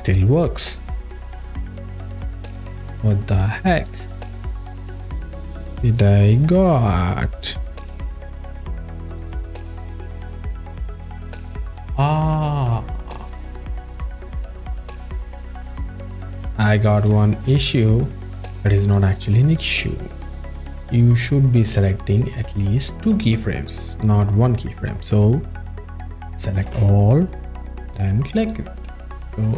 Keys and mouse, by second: 0.7 click, 5.8 click, 12.9 click, 14.2 ctrl+z, 15.6 z, 16.6 z, 17.3 z, 18.9 click, 20.9 click, 21.9 alt+shift+middle click, 25.0 click, 26.7 a, 28.4 click.